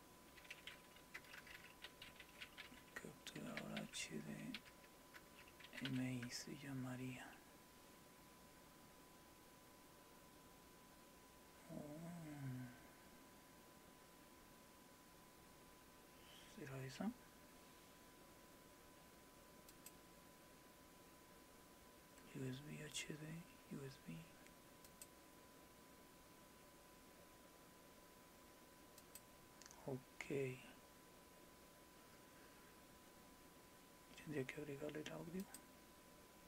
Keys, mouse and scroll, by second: 19.7 click, 24.9 click, 29.0 click, 35.4 click.